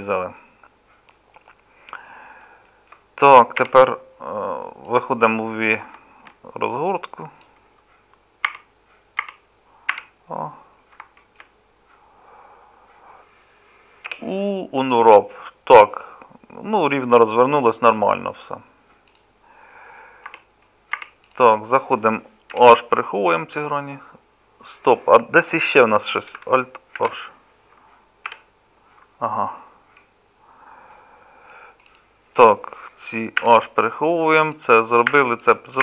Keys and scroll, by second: 3.6 a, 20.3 Tab, 21.0 Tab, 22.6 h, 27.0 alt+h, 28.3 KP_Divide, 33.5 h, 35.2 h.